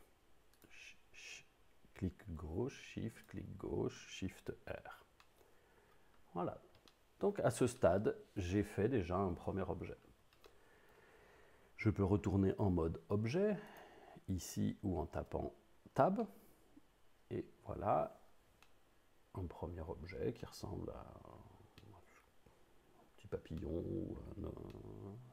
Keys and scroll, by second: 4.6 shift+r, 15.2 Tab.